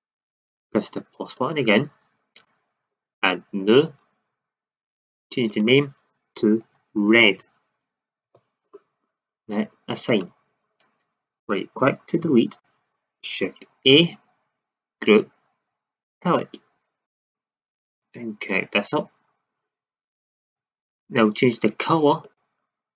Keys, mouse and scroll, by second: 1.3-3.1 drag, 11.3 right click, 12.2 Delete, 13.6 shift+a, 20.7 shift+z.